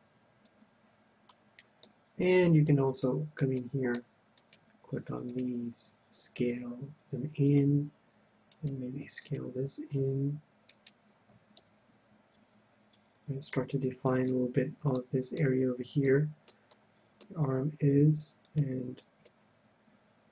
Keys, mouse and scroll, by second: 0.4-2.1 drag, 1.9-5.1 middle drag, 4.2-6.9 right drag, 6.4 s, 7.6-9.3 drag, 8.5-12.4 right drag, 11.5 s, 13.6-15.2 drag, 14.1 KP_1, 15.0-19.3 middle drag, 18.4 right click, 19.6 middle click, 19.6 click, 19.7-20.3 middle drag, 19.7 right click.